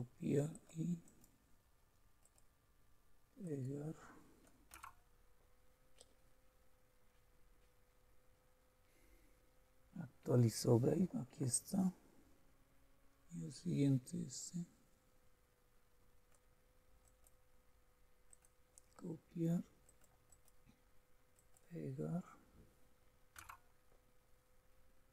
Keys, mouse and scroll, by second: 0.5 click, 2.2 click, 3.4 click, 4.6 click, 4.7 Return, 14.4-16.4 drag, 17.0 click, 18.3 click, 19.9 click, 20.8-23.1 drag, 21.4 right click, 23.4 Return.